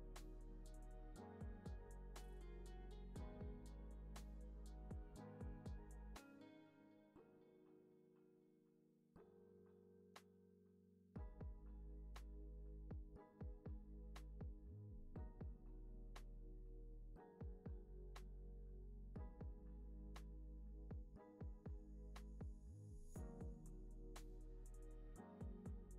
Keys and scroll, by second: 12.8 u, 14.2 alt+q, 17.1 alt+w, 18.3 alt+x, 18.7 alt+z, 20.0 alt+x.